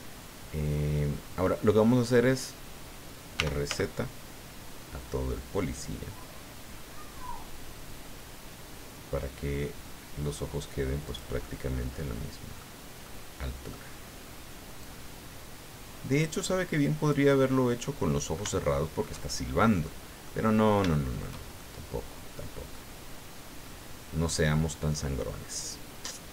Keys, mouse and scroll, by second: 0.2 scroll down 2, 0.9 scroll up 2, 3.3 r, 3.7 z, 11.0 click, 11.4-12.7 middle drag, 13.0-13.9 middle drag, 14.8-17.3 drag, 17.5-18.5 middle drag, 18.6-19.2 shift+middle drag, 19.6 shift+scroll down 3, 19.8 middle click, 20.5 scroll up 2, 20.9 shift+click, 21.6-22.9 shift+drag.